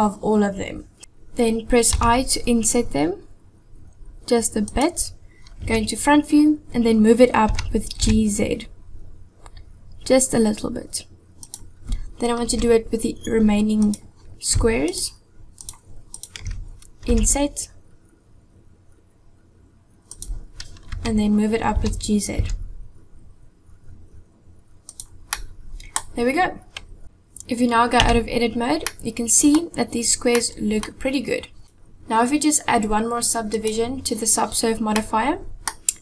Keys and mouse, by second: 1.0 KP_7, 2.0 i, 5.6 KP_1, 7.5 g, 12.5 KP_7, 13.9 click, 15.5 shift+click, 16.2 shift+click, 17.1 i, 20.9 KP_1, 21.7 g, 25.4 middle click, 27.0 Tab, 28.1 Tab, 28.9-29.5 middle drag, 30.4-30.8 middle drag, 31.6 click, 33.6 click, 35.0-35.7 middle drag.